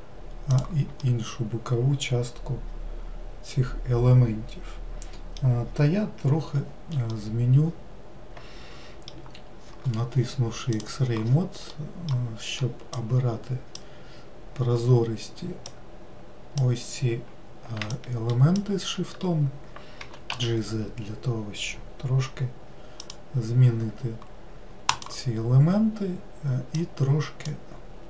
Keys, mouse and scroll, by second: 1.0-4.1 middle drag, 7.1-10.1 middle drag, 10.7-11.7 drag, 11.7-12.9 middle drag, 12.9 click, 15.6 ctrl+click, 17.9 shift+click, 20.0 g, 24.9 click, 26.8 click.